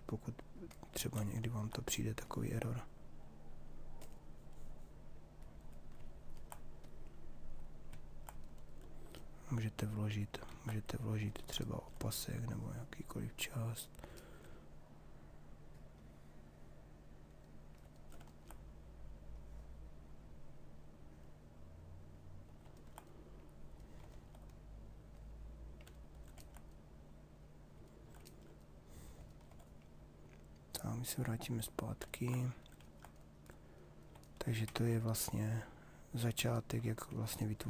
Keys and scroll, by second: 10.0 ctrl+z.